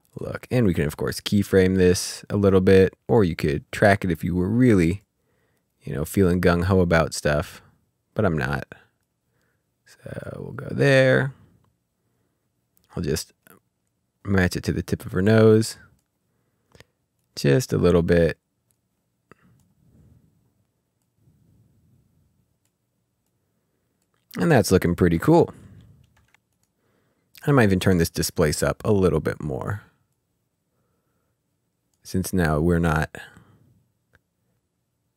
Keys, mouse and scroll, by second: 4.9 middle click, 5.1 click, 9.0 click, 12.9 click, 13.6 click, 16.6 click, 19.8 click, 25.5 ctrl+scroll down 1, 26.0 scroll down 1, 26.4 click, 28.9 click, 34.1 click.